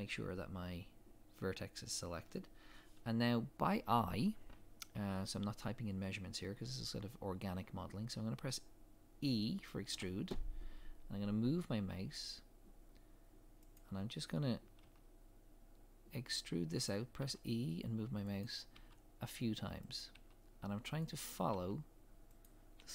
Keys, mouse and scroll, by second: 9.9 e.